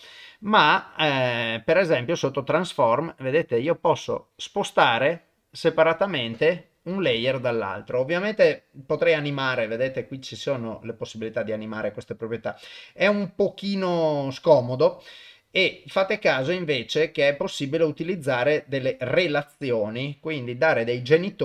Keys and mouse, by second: 0.3 click, 2.2 middle click, 3.3-6.1 drag, 6.4 click, 12.7 click, 13.9 drag, 15.0 click, 15.7 click.